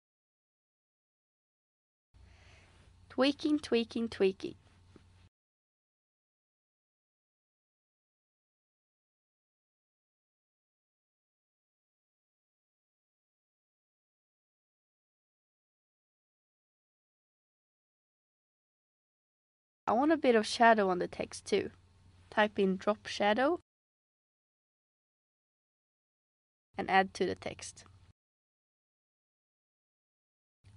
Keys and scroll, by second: 22.3-23.5 typing, 25.0-25.7 typing.